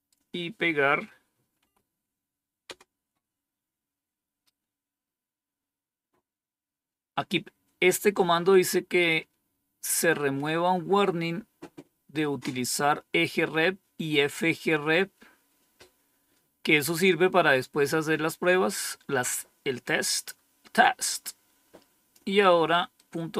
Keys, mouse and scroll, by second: 1.5 Right, 2.6 Return, 21.1 click, 22.3 click, 22.9-23.3 right drag.